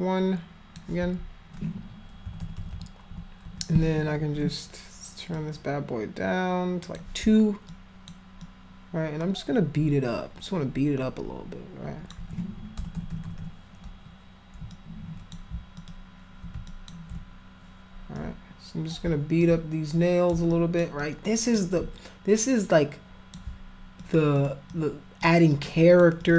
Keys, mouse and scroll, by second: 2.3-3.5 typing, 5.4-7.0 drag, 7.7 alt+click, 8.4-12.1 alt+drag, 12.8-13.4 typing, 14.8 shift+click, 15.8 alt+click, 16.7 shift+click, 18.2 alt+click, 19.5 alt+click, 20.5 alt+click, 21.1 alt+click, 21.8-23.3 drag, 24.0 alt+click, 24.4 alt+click, 24.7 alt+click, 25.5 alt+click, 25.9 alt+click, 26.2 alt+click.